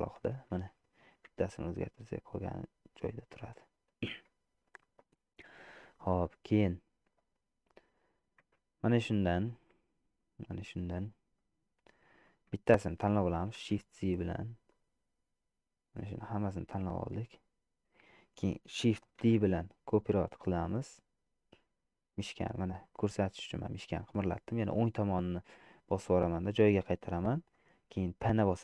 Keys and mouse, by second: 1.6 g, 3.1 click, 4.3 Tab, 4.9 click, 6.0 shift+click, 8.7 Tab, 9.5 click, 10.3 click, 12.3 click, 14.1 shift+z, 14.9-16.5 drag, 17.0-18.3 middle drag, 19.5 shift+d, 28.4 p.